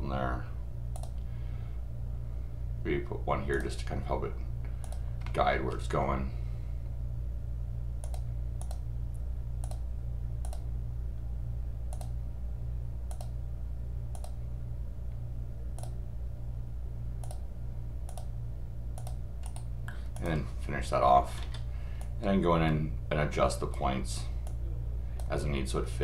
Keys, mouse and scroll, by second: 0.9 click, 3.5 click, 4.8 click, 5.2 middle click, 8.0 click, 8.6 click, 9.6 click, 10.4 click, 11.9 click, 13.1 click, 14.1 click, 15.8 click, 17.2 click, 18.1 click, 19.0 click, 19.4 right click, 20.1 click, 22.0-23.7 drag, 24.4 click.